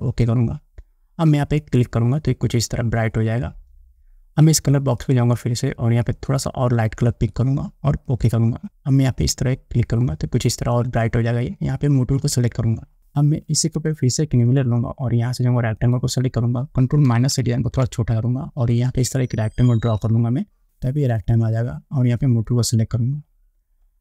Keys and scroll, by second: 17.8 ctrl+-.